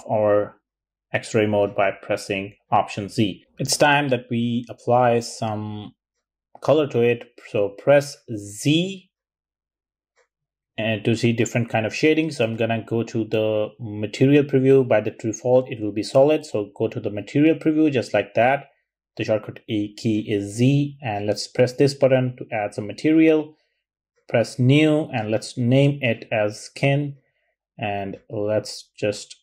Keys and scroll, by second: 9.8 z, 25.2 super+a, 25.5-26.0 typing, 26.2 Return.